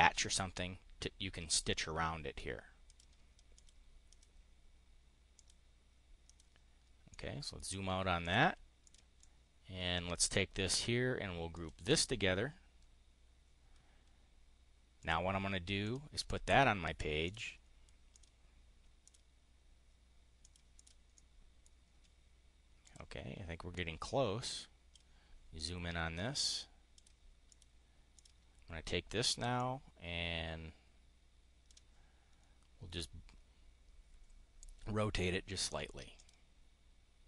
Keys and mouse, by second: 2.8 click, 3.5 click, 4.0 click, 5.3 click, 6.2 click, 7.0 click, 8.1 click, 8.8 click, 9.1-10.2 drag, 11.5 click, 15.0 click, 15.7 click, 17.2 click, 18.1 click, 19.0 click, 20.4 click, 21.0 click, 22.8 click, 23.7-25.0 drag, 26.2 click, 26.9 click, 27.3 click, 28.1 click, 29.4-31.7 drag, 36.1 click.